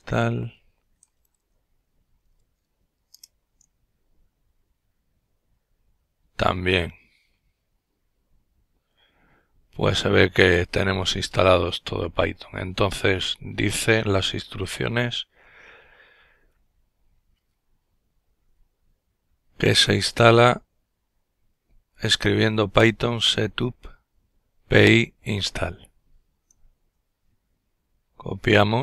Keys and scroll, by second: 0.0-4.2 typing.